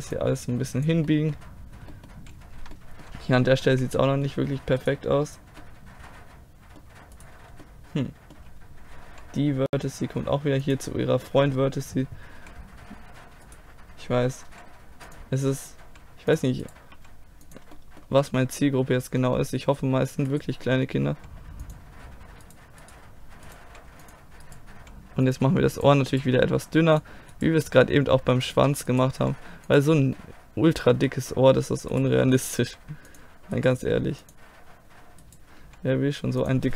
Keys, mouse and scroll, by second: 0.2-2.0 drag, 2.0-3.7 middle drag, 3.7 z, 4.2 middle click, 5.7-6.8 middle drag, 7.7 middle click, 8.1-9.1 right drag, 9.1 g, 12.4 z, 13.5-14.5 right drag, 14.5 g, 15.0 click, 15.6 right click, 15.8 g, 16.3 click, 16.6 right click, 16.9 g, 17.4 click, 18.3-20.3 middle drag, 20.3 right click, 21.1 g, 22.0-23.6 drag, 23.6 g, 24.7 g, 26.3 g, 27.6 g, 29.0 click, 29.2 g, 30.2 click, 30.4 middle click, 31.9 right click, 32.6 g, 33.7 g, 35.6 g, 35.8-36.7 drag.